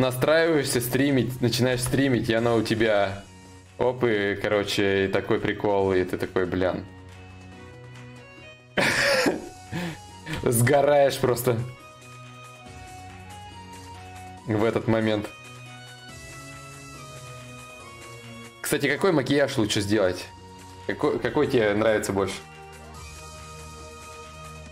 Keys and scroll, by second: 1.3 ctrl+z, 1.3 y.